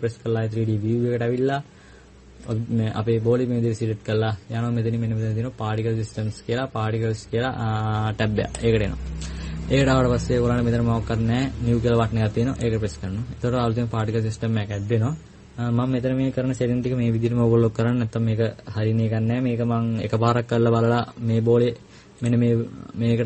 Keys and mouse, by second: 0.0 Escape.